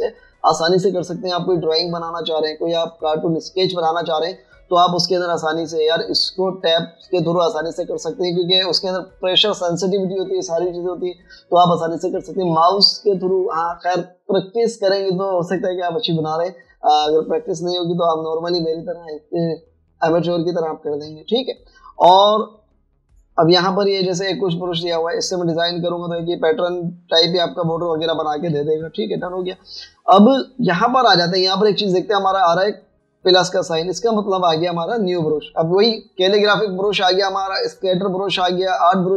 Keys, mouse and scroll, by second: 25.1 typing, 27.6 typing, 29.6-30.3 typing.